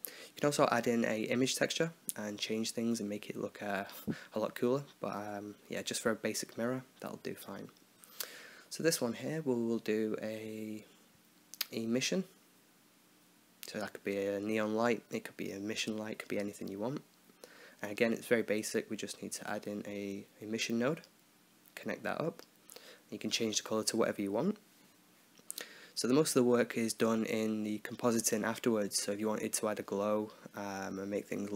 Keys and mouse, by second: 2.5 middle click, 5.6-7.8 drag, 13.4 s, 16.3 click, 16.7-17.9 right drag, 17.7 x, 17.9 click, 18.5 shift+a, 21.9-24.4 drag, 25.2-26.3 middle drag, 27.4-28.7 drag, 29.3 click, 30.7 click.